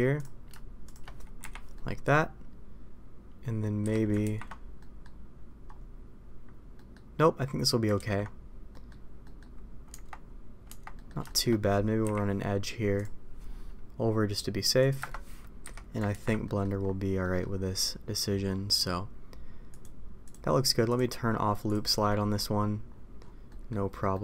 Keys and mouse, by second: 0.8 shift+click, 1.7 middle click, 3.7 a, 4.2 ctrl+t, 4.7 middle click, 6.7 middle click, 7.9 ctrl+z, 8.6 middle click, 9.2 middle click, 9.8 Tab, 10.6 Tab, 10.9 middle click, 11.2 shift+middle drag, 12.0 k, 15.6 a, 16.1 ctrl+t, 16.4 middle click, 17.2 middle click, 19.7 click, 20.2 click, 20.8 click, 23.4 middle click, 24.1 middle click.